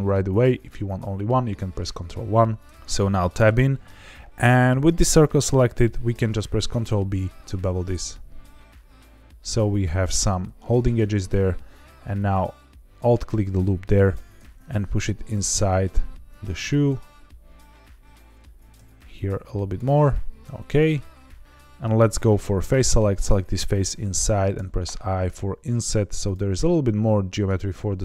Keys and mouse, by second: 1.8 ctrl+1, 2.2 ctrl+2, 2.7 Tab, 3.2 shift+middle click, 6.1 ctrl+b, 10.0 click, 12.1 alt+click, 13.5 middle click, 14.1 g, 14.3 x, 16.5 click, 16.8-18.3 middle drag, 18.5 g, 18.7 x, 19.6 click, 19.9-21.4 middle drag, 21.4 ctrl+z, 22.5 3, 23.1 click, 24.5 i, 26.2 click, 27.0 middle click.